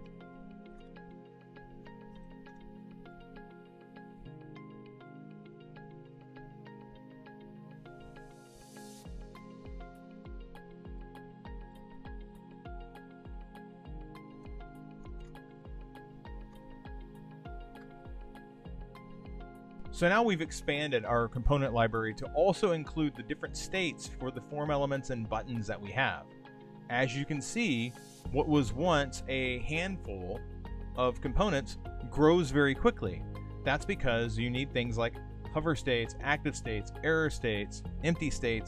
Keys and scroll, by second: 0.0-2.8 typing, 5.8 super+a, 8.1 shift+a, 10.4 super+v, 11.3 super+z, 11.8 super+v, 14.8 shift+e, 16.4 shift+s, 17.9 super+s.